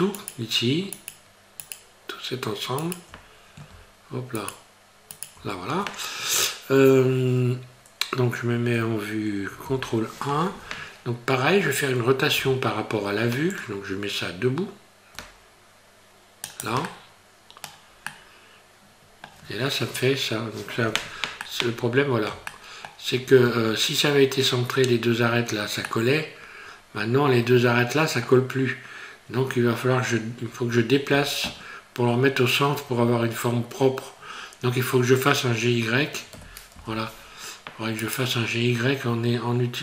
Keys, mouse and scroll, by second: 0.2 shift+right click, 1.0 shift+right click, 1.6 shift+right click, 2.8 shift+right click, 4.4 shift+right click, 5.1 shift+right click, 9.7 ctrl+KP_1, 12.4 r, 16.9 middle click, 18.1 middle click, 21.5 middle click, 22.5 shift+middle click, 26.0 middle click, 34.2 scroll down 3, 34.4 scroll up 1, 34.6 scroll down 1, 36.3 g.